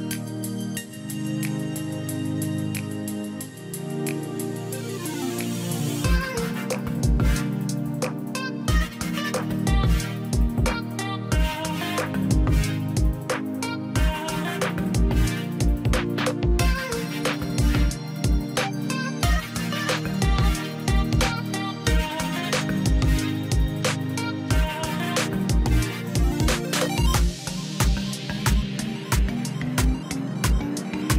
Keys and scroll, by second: 3.1 ctrl+u.